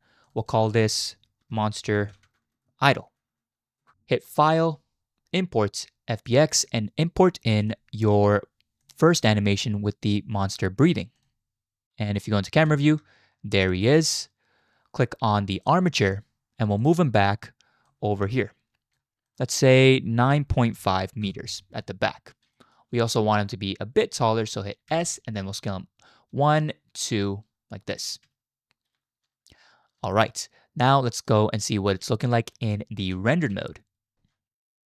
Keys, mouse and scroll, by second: 0.4-3.8 drag, 4.4-6.4 drag, 12.6 KP_0, 13.9 shift+drag, 15.6 click, 17.9-19.0 drag, 19.3-21.3 drag, 22.5 shift+click, 24.9 s, 30.1-31.3 shift+middle drag, 33.2 z.